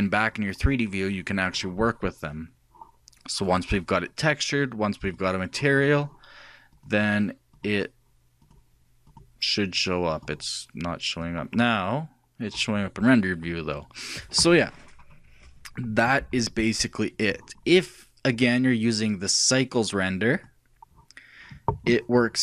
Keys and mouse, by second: 0.0-1.7 drag, 5.2-7.2 drag, 12.1-16.4 drag, 18.9-20.4 drag.